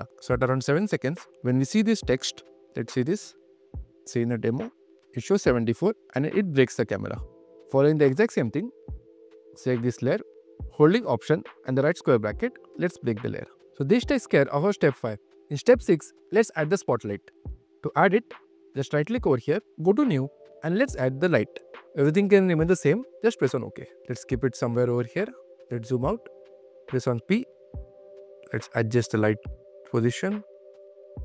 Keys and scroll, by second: 0.0 q, 2.4 super+q, 8.3 super+q, 8.4 super+Tab, 9.0 q, 11.1 alt+q, 12.3 alt+], 12.8 alt+q.